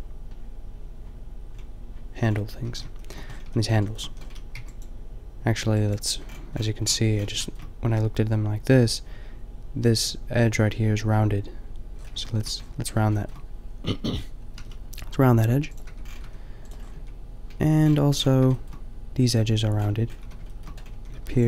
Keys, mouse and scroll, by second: 1.5-2.7 middle drag, 2.7 Tab, 3.5 a, 3.7 a, 4.1 a, 4.6 b, 5.6 b, 6.3 click, 6.9 click, 14.6 g, 15.8 Tab, 16.2 a, 17.0 Tab, 17.7 a, 20.2-21.4 typing, 21.2 ctrl+r.